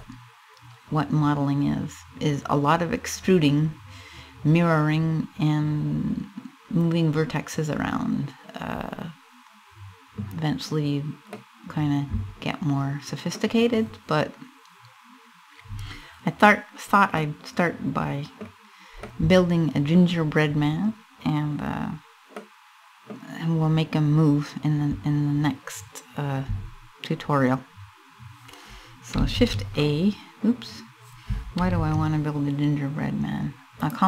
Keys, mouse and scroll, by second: 6.5 scroll up 1, 7.8-8.3 scroll up 2, 8.3-9.4 scroll down 3, 10.9 middle click, 12.6 middle click, 16.0-16.7 scroll down 2, 16.7 middle click, 17.5 middle click, 17.9 middle click, 18.2 scroll down 2, 18.7 middle click, 19.7-20.2 scroll up 4, 20.7 scroll down 1, 21.5 scroll down 1, 21.9 middle click, 28.9 shift+a, 31.3 shift+a.